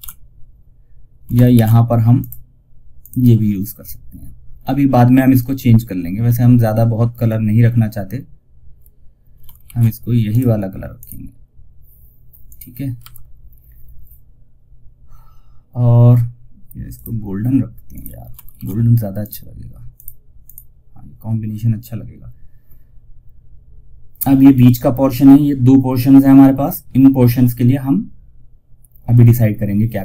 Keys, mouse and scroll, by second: 0.8 ctrl+alt+s, 1.5 click, 8.9 ctrl+alt+shift+s, 9.6 click, 11.2 scroll down 1, 11.7 click, 11.9 click, 12.3 F4, 16.2 click, 17.8 ctrl+alt+shift+s, 18.5 click.